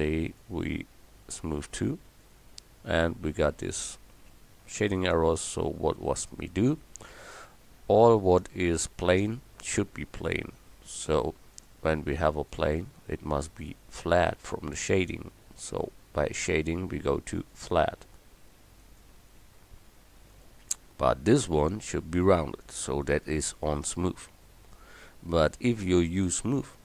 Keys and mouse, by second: 0.2-1.5 right drag, 2.9-7.5 drag, 7.5 Tab, 11.6 click, 23.9 Tab.